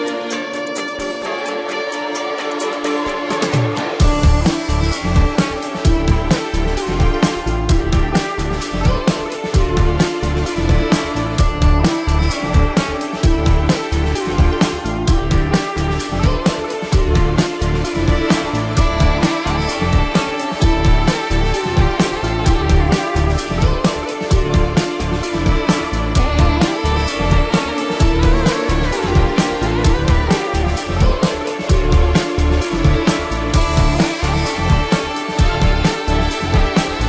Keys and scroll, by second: 1.1 ], 2.3 ], 2.9 ], 3.6 space, 3.9 ], 4.7 ctrl+-, 5.1 ], 6.9 ], 7.9 ctrl+alt+z, 8.6 ], 8.8 ctrl+alt+z, 9.3 ], 13.5 space, 14.0 space, 19.5 space, 21.1 space, 24.9 space, 28.9 space, 33.4 space, 36.9 ctrl+=.